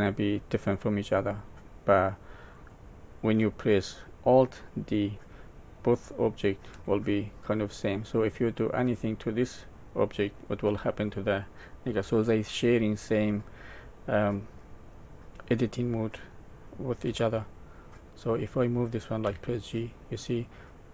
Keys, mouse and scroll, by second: 1.9 middle click, 6.7 Tab, 8.5 click, 17.0 x, 19.2 g.